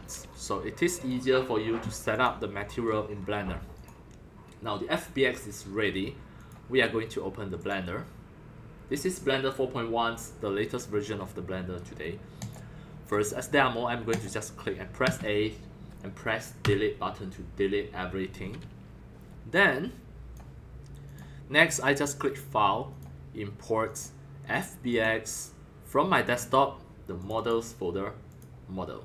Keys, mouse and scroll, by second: 1.0-13.2 drag, 14.1 click, 15.0 a, 16.6 Delete, 18.6 middle click, 18.6-19.4 scroll up 2, 19.2 middle click, 19.5 click, 20.4 click, 21.8 click, 22.8 click, 23.8 click, 24.9 click, 26.2 click, 27.2 click, 27.3 click, 28.2 click.